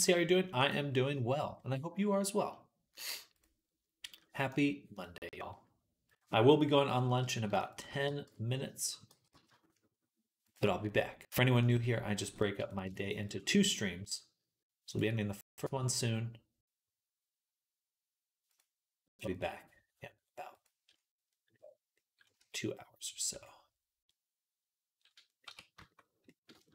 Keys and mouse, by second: 0.6-3.2 middle drag, 3.2-4.4 drag, 4.4 middle click, 4.8 click, 4.9-5.9 middle drag, 5.9-7.0 drag, 7.0 shift+middle click, 7.5 alt+shift+click, 7.6-11.5 alt+shift+middle drag, 8.1 x, 8.9 g, 11.5-12.5 drag, 12.5 shift+middle click, 12.8 alt+shift+click, 12.9 alt+shift+middle click, 13.1 alt+shift+click, 13.2-14.8 middle drag, 14.8-20.5 drag, 20.5-26.7 middle drag, 22.3 Tab, 25.6 shift+Tab.